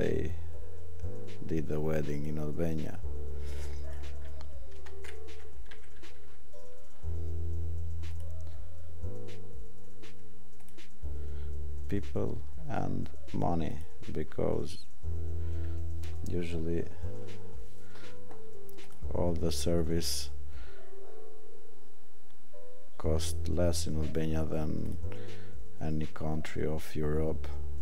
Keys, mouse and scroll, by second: 10.6 click.